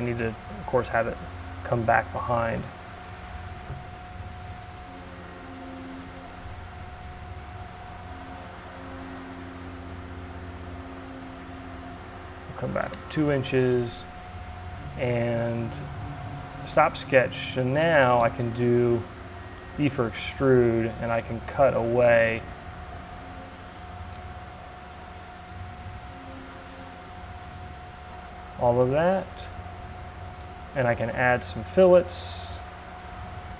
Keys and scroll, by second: 0.9 l, 3.6 d, 12.3 Return, 17.7 e.